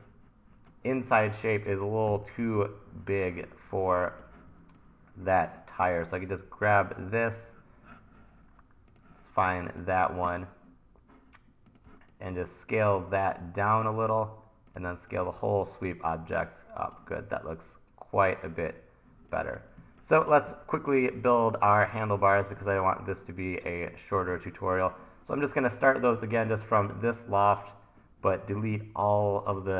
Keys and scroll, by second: 2.2 t, 3.4 super+z, 4.5 t, 6.4 super+z, 11.9 t, 15.0 t, 19.8 1, 21.2 super+s.